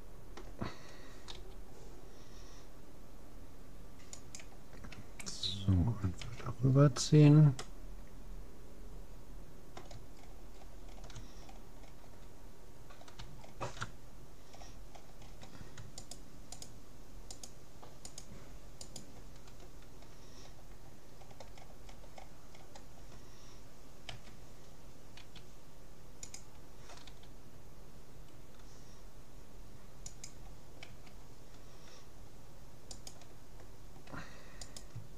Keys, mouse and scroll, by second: 1.3 g, 6.3 a, 6.7-9.3 middle drag, 10.2-12.6 middle drag, 12.6-13.4 scroll down 1, 13.4-15.3 middle drag, 16.1-20.5 right drag, 21.3-24.3 middle drag, 24.1 a, 25.3 s, 27.1 g, 30.9 a, 31.3 middle click, 32.9-35.1 right drag.